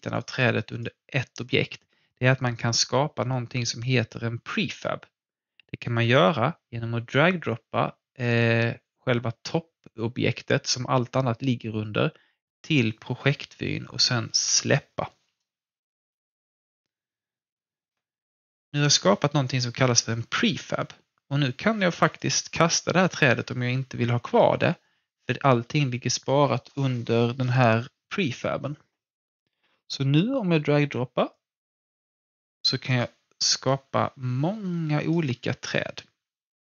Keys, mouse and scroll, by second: 6.0-10.7 drag, 11.8-22.0 drag, 22.1 click, 31.3-36.6 drag.